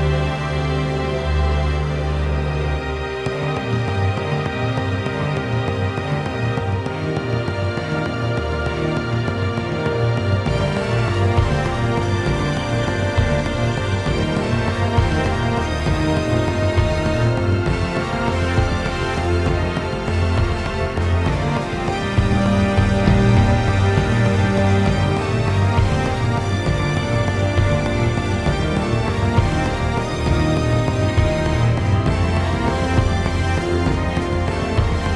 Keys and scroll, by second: 4.1 ctrl+z, 5.4 ctrl+z, 5.4 ctrl+z, 5.9 ctrl+z, 8.6 ctrl+z, 26.6 ctrl+z, 29.3 ctrl+z, 29.3 ctrl+z, 29.9 ctrl+z, 32.7-34.7 ctrl+z.